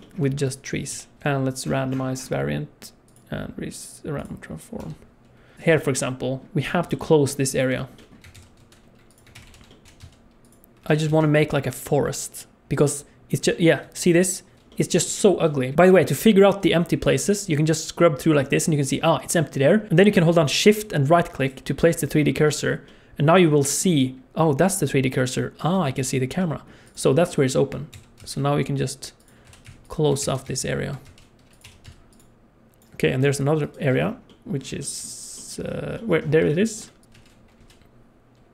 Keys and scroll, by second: 0.9 g, 1.1 n, 4.8 n, 8.3 shift+d, 9.3 shift+r, 9.4 shift+r, 9.8 g, 10.8 alt+a, 11.1 ctrl+s, 19.9 alt+shift+z, 27.9 shift+d, 29.4 r, 30.2 shift+d, 31.6 r, 32.3 alt+a, 32.3 ctrl+s, 32.3 alt+shift+z, 37.0 shift+d, 37.6 n, 37.6 g.